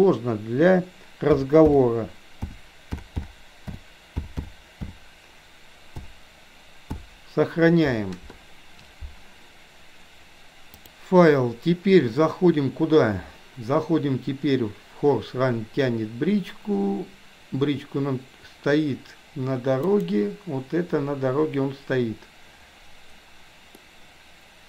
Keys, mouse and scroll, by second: 10.7-20.4 drag, 23.8-24.6 middle drag.